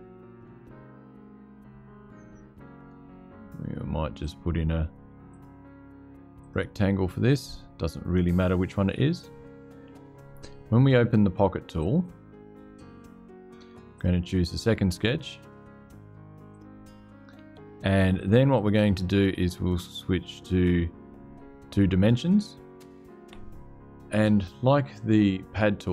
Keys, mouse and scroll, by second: 0.3-1.2 scroll up 2, 1.2-2.7 drag, 3.9 click, 5.0 click, 6.1 click, 7.2 click, 11.5 click, 13.7 click, 16.2 click, 18.3 click.